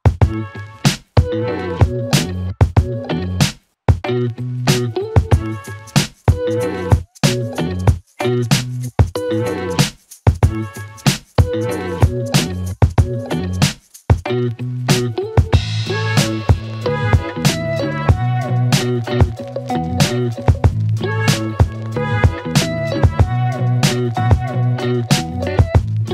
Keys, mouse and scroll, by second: 7.1-11.0 click, 11.2 z, 11.3-14.1 click.